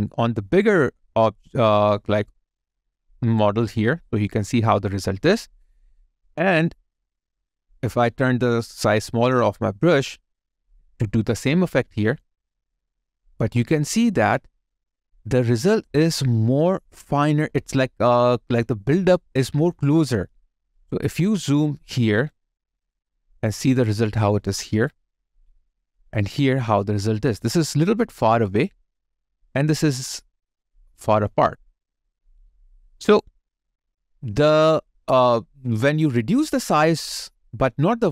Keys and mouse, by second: 7.9 ctrl+click, 20.4 alt+right click, 21.1 alt+middle click, 21.8 alt+right click, 22.5 alt+middle click, 24.2 alt+right click, 25.4 alt+middle click, 26.9 alt+right click, 29.3 alt+middle click, 29.9 alt+right click, 30.5 alt+middle click, 31.6 alt+right click, 33.4 alt+click, 34.0 alt+middle click.